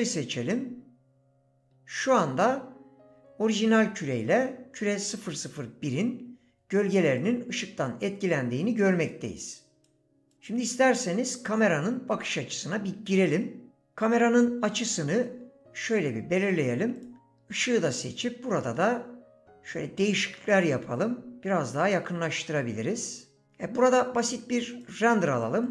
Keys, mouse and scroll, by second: 8.9 click, 10.3 click, 12.1 KP_0, 14.3 g, 15.1 middle click, 20.0 click, 24.8-25.7 drag.